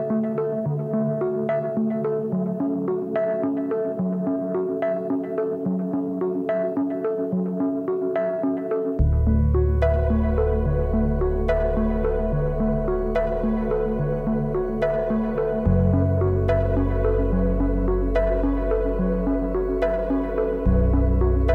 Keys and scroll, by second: 2.2 Return, 10.3 6, 10.8 5.